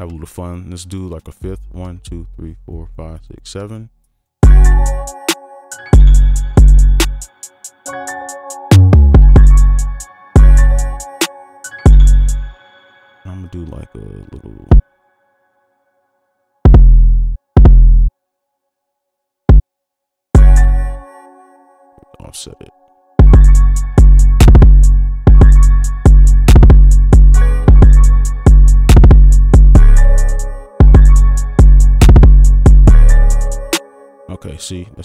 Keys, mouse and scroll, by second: 1.6 ctrl+l, 1.7 shift+Up, 2.2 shift+Up, 2.8-3.4 shift+Up, 3.6 right click, 10.1 space, 10.3 space, 12.4 space, 15.1 double click, 20.3 space, 20.6 space, 21.0 ctrl+click, 25.0 space, 25.6 right click, 27.6 space, 28.3-30.3 scroll down 1, 30.5 space, 30.8 space, 31.6 right click, 33.8 space.